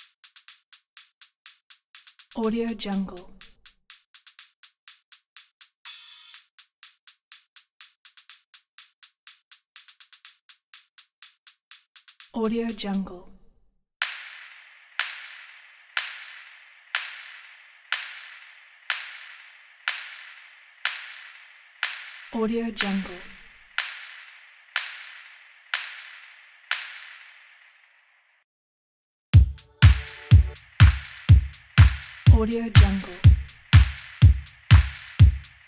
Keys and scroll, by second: 13.1 s.